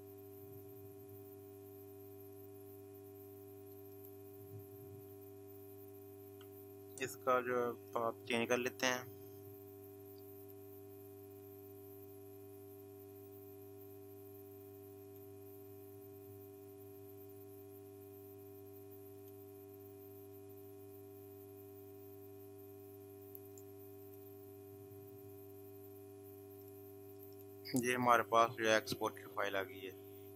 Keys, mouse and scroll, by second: 4.0 click, 7.8 click, 10.4 click, 10.7 click, 15.1 click, 18.9 click, 23.9 click, 26.6 click.